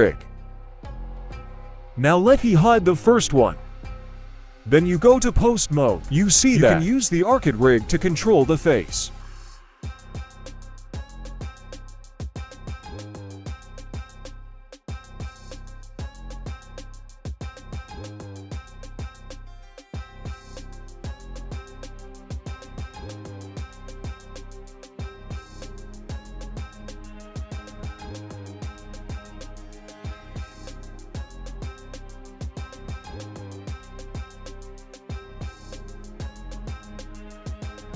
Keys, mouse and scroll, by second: 0.2 h, 0.4-1.4 scroll up 1, 1.4 click, 1.4 right click, 1.9 click, 1.9 right click, 2.6-4.0 drag, 3.9 right click, 4.2 middle drag, 4.8 g, 7.9 middle click, 8.2-8.7 scroll up 1, 9.1 right click, 9.6 middle click, 10.0 g, 12.8 g, 13.5-14.2 middle drag, 14.3 middle click, 15.0 right click, 15.2-15.8 scroll down 1, 16.0 right click, 16.6 g, 17.4 drag, 17.4 right click, 17.8 click, 17.8 right click, 18.3 g, 20.1 middle drag, 21.3 click, 21.3 right click, 21.8 click, 21.8 right click, 22.2 g, 24.0 click, 24.0 right click, 24.5 click, 24.5 right click, 25.2 click, 25.2 right click, 25.6 g, 29.1 a, 29.9 alt+g, 30.2 alt+t, 30.6 middle click, 31.0-31.5 scroll up 2, 31.3 middle click, 32.1 right click, 32.9-33.8 drag, 34.6-35.0 scroll down 1, 35.0 middle click, 35.5 right click.